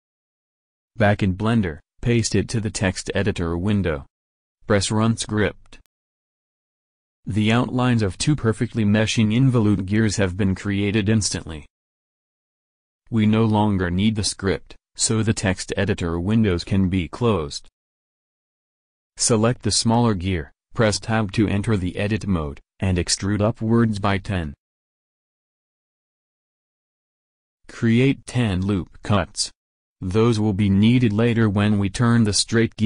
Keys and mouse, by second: 1.4-3.3 drag, 1.9 ctrl+v, 6.3-7.9 drag, 7.9-12.9 middle drag, 14.7 middle click, 16.8-18.1 middle drag, 18.1-19.4 drag, 19.7 Tab, 23.2 e, 27.3 a, 28.0 ctrl+r.